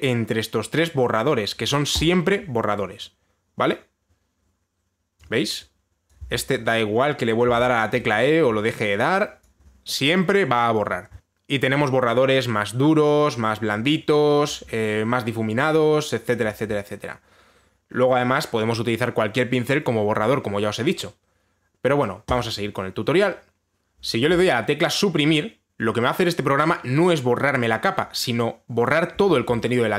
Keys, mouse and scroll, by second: 2.7 click, 5.9 click, 6.7 click, 6.9 e, 7.7 click, 8.1 e, 10.1 click, 15.1 click, 17.1 click, 22.9 click, 29.8 Delete.